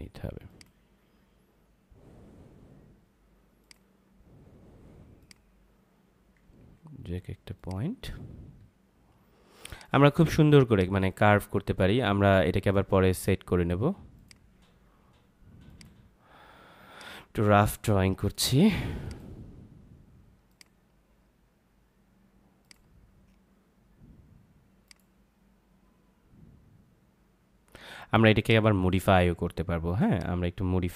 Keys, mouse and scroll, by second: 0.4 click, 3.6 click, 6.5 ctrl+z, 7.5 click, 10.3 space, 10.6 click, 10.8 space, 14.1 click, 28.3 click.